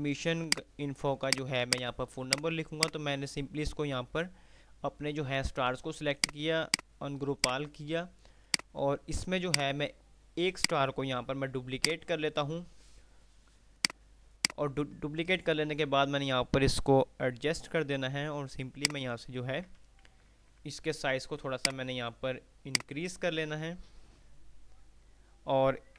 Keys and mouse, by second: 0.7 click, 6.4 click, 9.4 right click, 9.7 right click, 10.7 click, 11.4 F2, 14.1-15.2 drag, 18.7-19.6 shift+drag, 20.4 ctrl+r, 21.4 ctrl+r, 21.7-22.6 click.